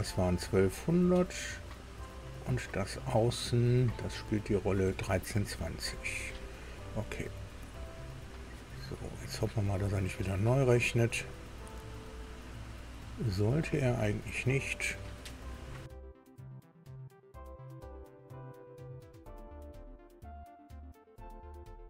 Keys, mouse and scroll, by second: 1.6 click, 3.0 click, 4.4 click, 7.3 click, 16.2 alt+Tab.